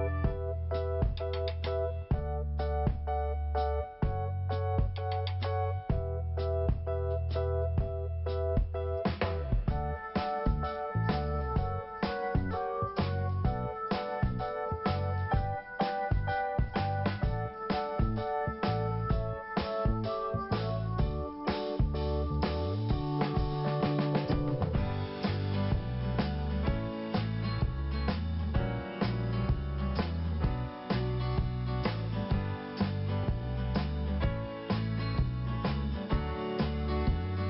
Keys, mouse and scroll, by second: 0.7 click, 1.7 click, 4.7 p, 4.8 click, 5.0 p, 5.3 click, 5.4 p, 5.5 click, 6.1 p, 6.6 click, 7.9 scroll down 1, 8.6 scroll up 2, 9.3 scroll down 1, 10.3 click, 11.9 scroll up 1, 12.9 click, 13.0 click, 14.3 click, 19.8-20.1 scroll up 2, 22.5 scroll up 1, 23.4 click, 26.2 click, 26.3 click, 26.8 click, 28.1 click, 30.2 click, 30.8-31.1 scroll up 3, 30.9 click, 33.3 click, 34.7 scroll down 1, 35.8 p, 36.9 click.